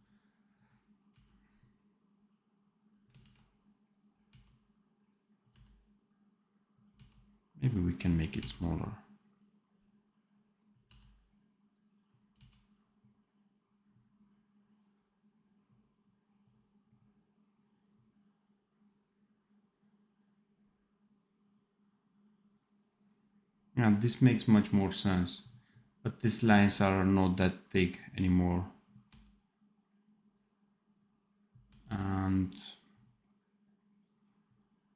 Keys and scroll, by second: 1.0 x, 3.1 ctrl+z, 4.2 x, 5.4 v, 6.8 x, 10.8 v, 12.2 x, 29.0 d, 31.5 d.